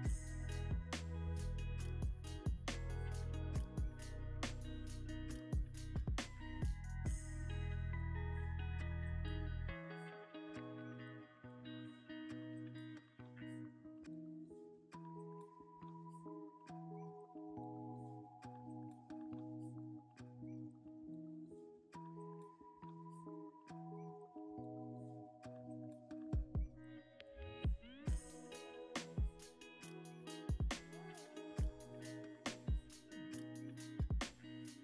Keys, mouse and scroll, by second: 0.7-1.9 scroll up 1, 3.1 Tab, 7.5-8.2 scroll up 1, 10.0-11.2 scroll up 1, 11.2-12.0 scroll up 1, 12.0-12.7 scroll up 1, 25.0-25.7 scroll up 1, 25.8 middle click, 26.5-28.0 drag, 28.3-32.8 shift+drag, 33.8-34.8 shift+drag.